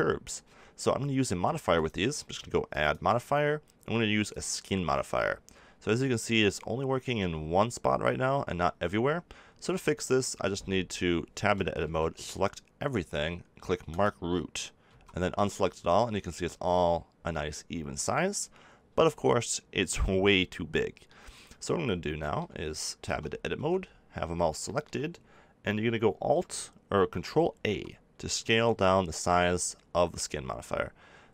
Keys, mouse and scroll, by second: 4.3-9.6 drag, 9.6 middle click, 11.4 Tab, 11.8 a, 14.8 a, 15.1 Tab, 15.7 middle click, 20.3-22.3 middle drag, 23.0 Tab, 23.5 a, 27.6 ctrl+a.